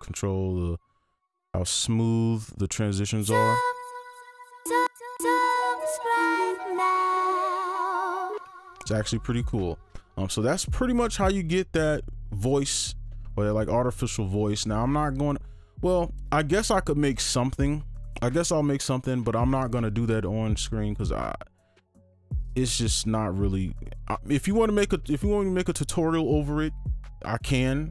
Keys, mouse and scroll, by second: 4.6 space, 4.8 space, 5.2 space, 8.3 space.